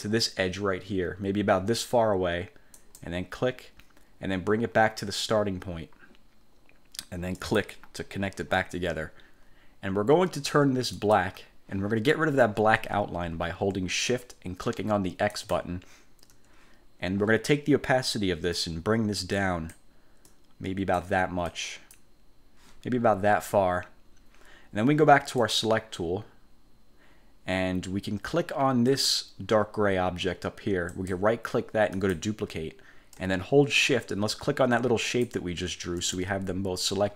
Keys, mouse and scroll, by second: 2.9 click, 7.5 click, 11.1 click, 15.5 shift+click, 18.7-20.0 drag, 20.4 click, 21.6 click, 25.5 click, 29.0 click, 31.0 right click, 32.1 click, 35.2 shift+click.